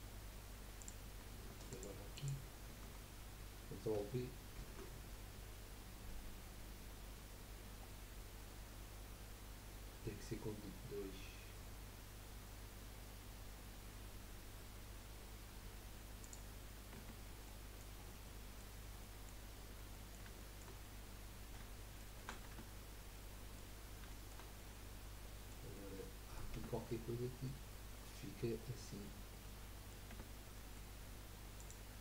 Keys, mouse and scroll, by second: 0.8 click, 1.7 alt+shift+click, 2.1 alt+shift+click, 4.5 ctrl+b, 16.7 scroll up 1, 17.0 Tab, 17.4 middle click, 18.1 scroll down 4, 18.3-19.6 middle drag, 19.6 scroll down 3, 20.0 middle click, 20.9-21.5 scroll up 1, 21.5-22.3 middle drag, 22.3 scroll down 1, 22.5 Tab, 23.1 middle click, 23.7-24.1 scroll up 1, 24.1-26.6 shift+middle drag, 26.6 Tab, 26.9-29.1 middle drag, 29.1-29.4 scroll down 2, 29.4-30.1 middle drag, 30.1 Tab, 30.5 middle click, 30.9-31.6 scroll up 1, 31.6 click.